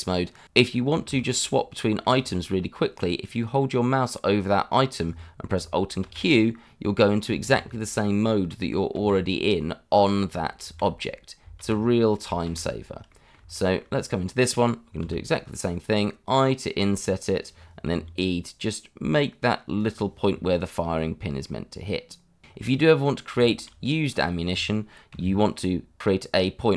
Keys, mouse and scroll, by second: 0.7-1.1 scroll down 1, 1.1 shift+middle click, 1.8 middle click, 2.4 shift+middle click, 2.7-3.0 scroll up 1, 6.0 alt+q, 7.4 alt+q, 8.9 alt+q, 10.6 alt+q, 11.5 alt+q, 12.4 alt+q, 13.1 middle click, 13.7 shift+middle click, 15.0 i, 17.4 click, 17.9 e, 19.8 click, 20.3 middle click, 22.6 scroll up 1, 22.8 middle click, 23.6 shift+middle click, 23.7 scroll up 1, 25.1 i, 26.0 click, 26.3 middle click.